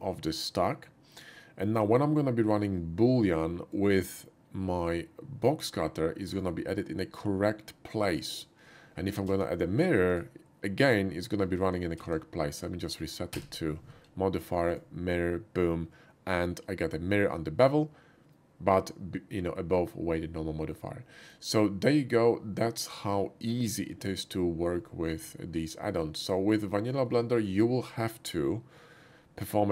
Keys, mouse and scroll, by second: 2.5-3.8 drag, 6.3 click, 9.3 alt+x, 10.1 click, 11.9 alt+x, 12.1 ctrl+z, 14.7 click, 21.4-23.4 middle drag, 26.3 click, 27.1 shift+middle drag, 27.8 shift+middle click.